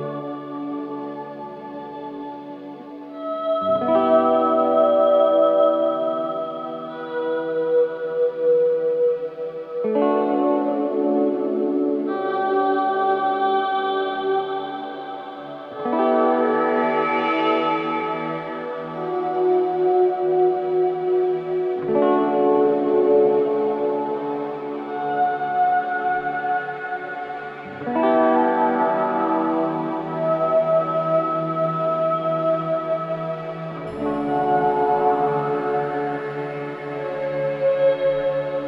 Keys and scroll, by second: 1.0 Delete, 2.1 ctrl+z, 8.9 4, 12.5 3, 12.9 ], 17.7 Escape, 24.3 ], 26.5 4, 37.8 F1.